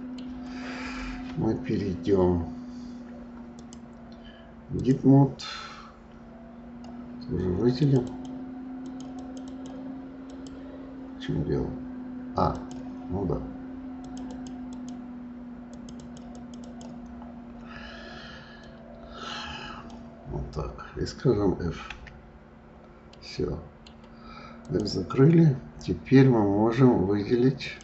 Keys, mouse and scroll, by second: 3.5-6.6 drag, 7.7 click, 8.0 click, 8.1 right click, 8.8 click, 9.1 click, 9.4 click, 10.2 click, 12.4 click, 14.0 click, 14.3 click, 14.7 click, 15.6 click, 16.0 click, 16.3 click, 16.6 click, 18.5 click, 23.1-24.6 middle drag, 24.6 click, 27.5 click.